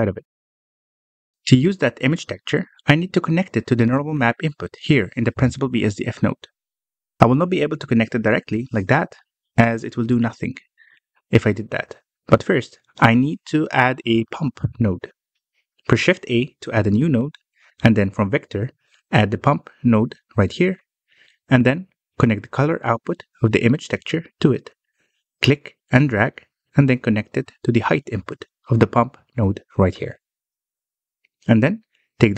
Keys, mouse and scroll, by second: 0.0-1.0 middle drag, 1.0 click, 1.7-3.0 drag, 3.0 scroll down 2, 3.6 scroll up 1, 4.3-5.8 scroll up 1, 5.8-6.8 drag, 6.9 middle click, 7.3-8.6 scroll up 2, 8.6-9.7 middle drag, 9.7-12.0 drag, 14.8-15.2 ctrl+right drag, 17.1 shift+a, 22.4-23.7 middle drag, 23.7 click, 30.8-32.3 middle drag.